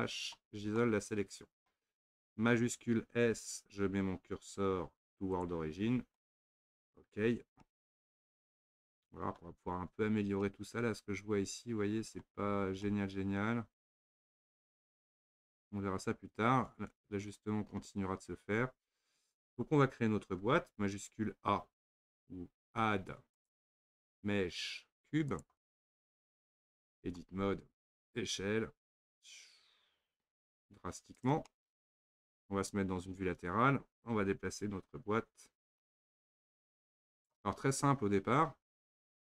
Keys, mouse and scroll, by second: 0.0 KP_Divide, 0.8-3.3 middle drag, 3.3 shift+s, 6.2-7.2 shift+middle drag, 7.2-7.6 scroll up 2, 7.7-19.5 middle drag, 19.5 click, 23.4-25.9 drag, 25.9-26.5 scroll down 7, 26.5-26.9 scroll up 1, 27.1 Tab, 28.4 s, 31.5-33.0 middle drag, 33.0 KP_3, 35.6 g, 37.7-39.2 scroll up 3.